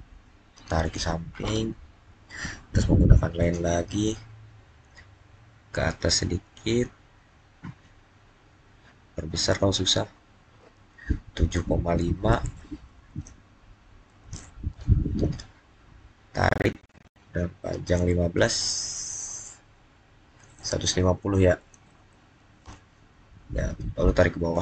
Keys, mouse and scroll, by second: 0.7 click, 3.3 click, 8.8-10.5 scroll up 1, 12.2 typing, 13.7-14.5 typing, 14.6 Return, 18.3-18.9 typing, 21.5 0, 22.5 Return, 24.4 click.